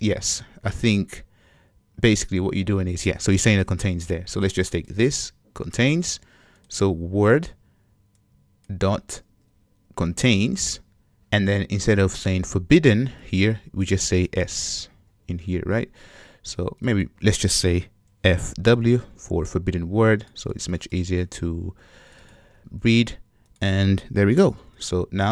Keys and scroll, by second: 3.9 super+c, 4.8 super+c, 5.2 super+v, 7.4 super+c, 9.3 super+v, 15.2 Escape, 21.2 Escape, 21.7 super+c, 22.5 super+v.